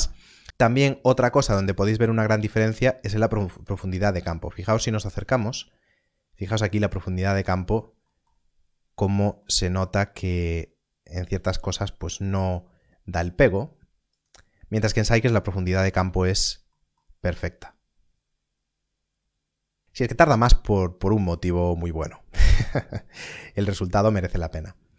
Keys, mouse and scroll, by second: 0.5 click, 3.9 scroll up 1, 4.6 middle click, 7.4 middle click, 10.6 scroll down 1, 11.6 middle click, 13.3 click, 14.8 middle click, 15.4 scroll up 1, 16.0 middle click, 19.6 middle click, 19.8 scroll down 1, 19.8 middle click, 24.1 middle click.